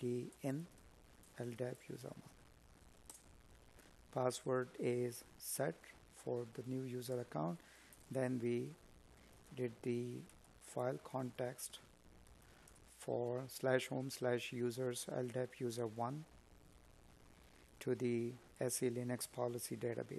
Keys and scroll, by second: 4.1 space, 7.3 space, 15.4 space.